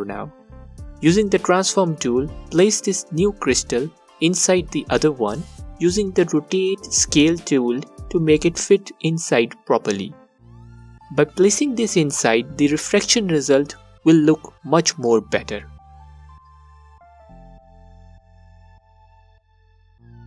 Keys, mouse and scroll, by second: 7.8 space, 18.9 space.